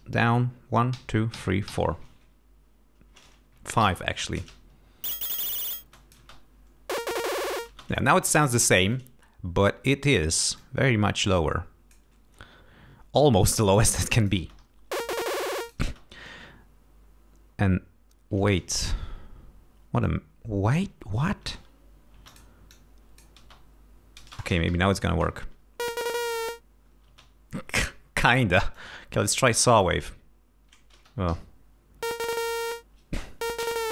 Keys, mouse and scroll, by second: 1.0 alt+shift+Down, 3.8 alt+shift+Down, 4.4 alt+shift+space, 5.8 space, 6.0 click, 7.7 space, 10.1 click, 10.6-12.1 drag, 12.9 scroll down 2, 14.0 click, 14.4 space, 14.7 ctrl+scroll down 2, 15.4 ctrl+click, 15.9 space, 20.0 click, 21.4 space, 22.2 space, 22.3 click, 23.4 space, 24.2 space, 24.9 Home, 25.1 space, 27.1 space, 28.7 click, 29.9 space, 31.0 space, 31.3 l, 33.7-33.9 drag.